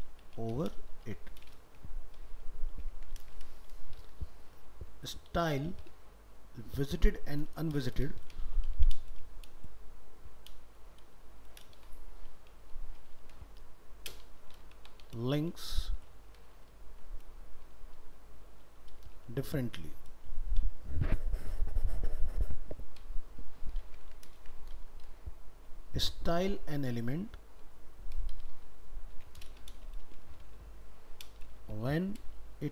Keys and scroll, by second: 3.0 ctrl+c, 3.3 ctrl+Return, 3.8 ctrl+v, 24.1 ctrl+c, 24.3 ctrl+Return.